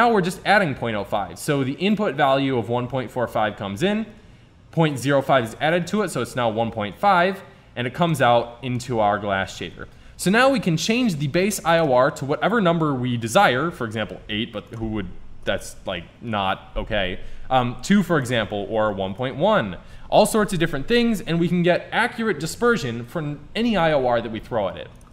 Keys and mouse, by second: 8.1-9.2 drag, 9.6 Tab, 10.8 middle click, 16.8-18.3 middle drag, 19.0 KP_1, 20.2 middle click.